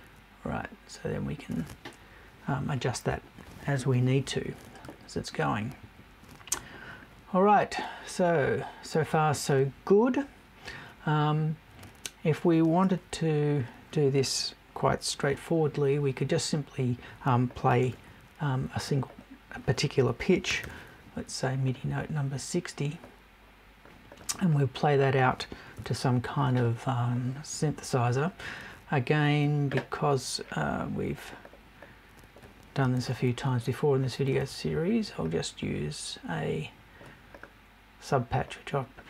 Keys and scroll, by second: 25.7 Left.